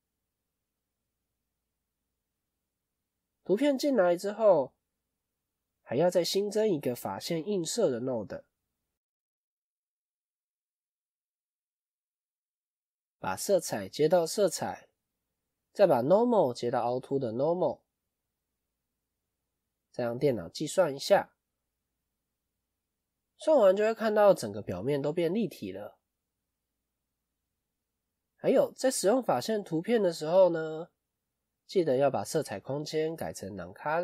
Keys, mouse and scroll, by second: 1.5 click, 23.0 scroll up 1, 24.2-25.1 scroll down 1, 25.1-25.6 scroll up 1, 26.4 scroll down 1.